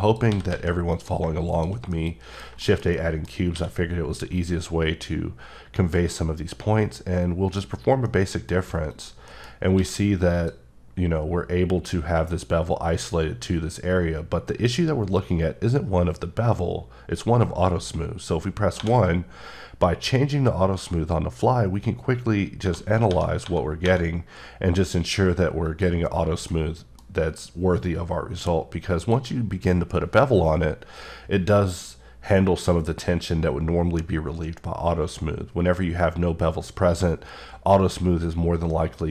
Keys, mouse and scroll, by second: 0.1 click, 0.3 s, 0.5 z, 0.9 click, 1.5 click, 1.9 middle click, 2.6 shift+middle click, 3.5 q, 4.3 click, 8.3 middle click, 8.9 click, 9.3 middle click, 9.5 scroll up 1, 9.7 q, 10.3 click, 18.8 1, 20.8 typing, 22.6-23.8 typing, 26.1-26.5 scroll down 2, 26.5 middle click, 27.1 scroll up 2, 29.0 click.